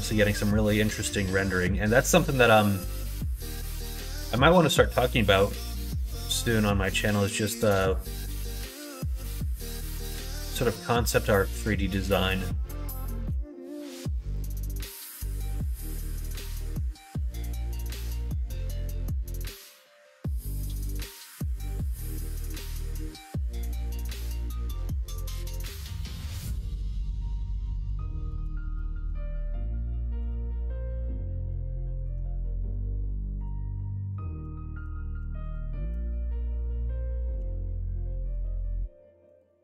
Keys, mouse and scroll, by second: 3.4 middle click, 4.0 middle click, 4.6 middle click, 5.3 shift+middle click, 5.8 middle click, 6.3 shift+middle click, 7.7 click, 8.2 click, 9.2 shift+click, 9.5 middle click, 14.4 click, 14.8 middle click, 15.6 2, 16.3 alt+click, 16.9 x, 18.3-21.3 middle drag, 23.6 click, 25.5 click, 26.7 shift+click, 27.7 ctrl+z, 27.9 ctrl+z, 28.3 ctrl+z, 28.6 ctrl+z, 30.2 click, 32.6 x, 34.1 click, 35.4 shift+click, 37.4 f, 37.8 middle click, 38.4 ctrl+r.